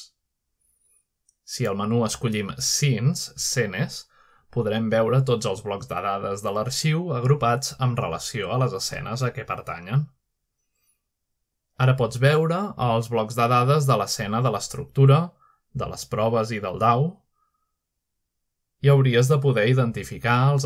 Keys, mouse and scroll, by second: 2.0 click, 3.2 click, 4.1 click, 5.6 click, 6.8 click, 10.5-11.6 drag, 12.2-13.2 drag, 15.4 click, 19.4 click.